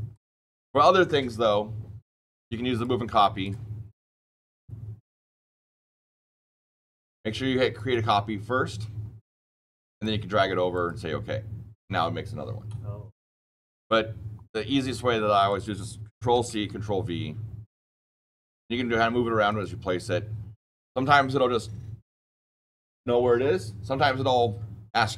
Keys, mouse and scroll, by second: 0.0 click, 2.7 click, 3.4 click, 4.2 click, 5.0 click, 5.8 click, 7.7 click, 9.6 click, 10.6 click, 13.5 ctrl+z, 15.3 click, 16.3 ctrl+c, 16.6 ctrl+v, 17.8 click, 19.4 click.